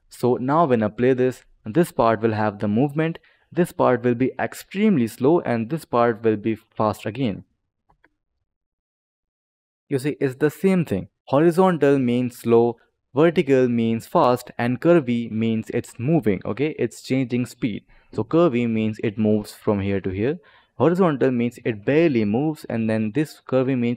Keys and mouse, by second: 0.0 click, 0.8 click, 7.8 space, 17.3 click, 19.2 click, 21.6 click.